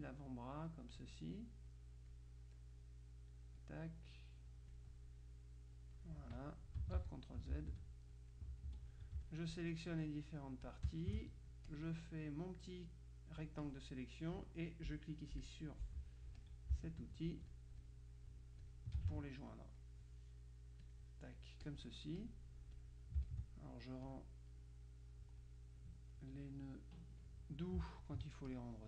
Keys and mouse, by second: 0.4-1.5 drag, 1.8 click, 2.8-4.2 drag, 6.5 click, 7.0 ctrl+z, 8.2 click, 8.8 F2, 9.3-10.5 shift+drag, 10.7 click, 11.8-14.4 drag, 15.5 click, 16.5-17.6 drag, 18.8 click, 21.0 click, 21.8 click, 22.8-23.9 drag, 24.2 click, 25.5-26.7 drag, 28.1-28.8 ctrl+drag.